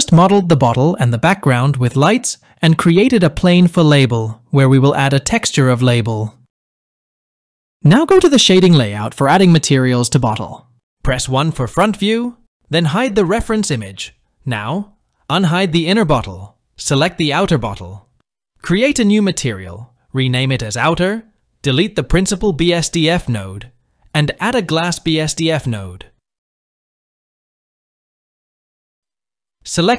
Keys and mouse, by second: 1.4 KP_1, 11.9 KP_1, 15.3 click, 16.3 click, 19.1 click, 19.4-20.5 drag, 22.1 middle click, 22.7 click, 23.7 Delete, 25.8-27.9 drag.